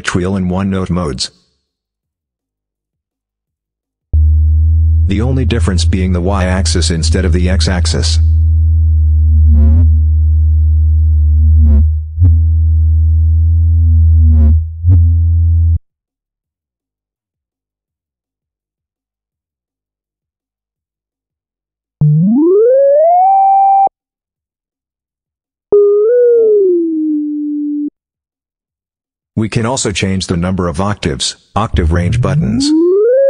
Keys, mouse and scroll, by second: 0.9 click, 1.8 click, 2.4 click, 3.0 click, 3.9-15.7 drag, 16.9 click, 17.7 click, 18.4-19.3 drag, 20.1 click, 20.8 click, 21.8-23.8 drag, 24.6 click, 24.9 click, 25.5-27.8 drag, 28.7-29.7 drag, 30.2-31.2 drag, 31.5-33.2 drag.